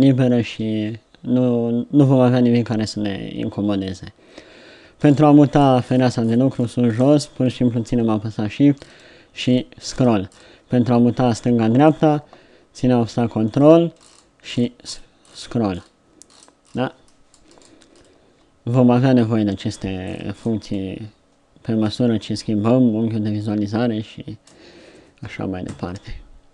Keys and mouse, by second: 25.2 KP_1.